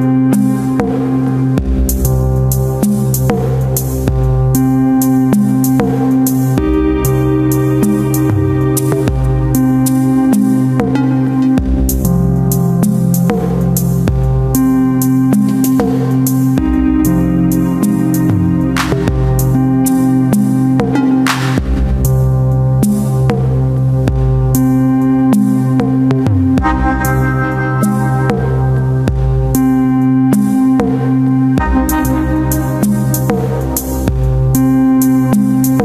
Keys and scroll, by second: 1.1 c, 1.8 Return, 2.1 ctrl+KP_Add, 2.7 alt+i, 3.3 ctrl+space, 4.2 F2, 4.7 space, 5.9 shift+F2, 6.3 space, 6.6 w, 9.6 Return, 10.3 shift+F2, 10.8 ctrl+d, 11.0 space, 11.8 space, 12.7 ctrl+g, 15.0 ctrl+space, 15.6 Return, 20.2 w, 21.3 ctrl+alt+d, 21.8 Return, 22.6 ctrl+m, 25.6 Return, 26.4 ctrl+KP_Add, 26.8 s, 27.0 space, 28.2 s, 28.9 ].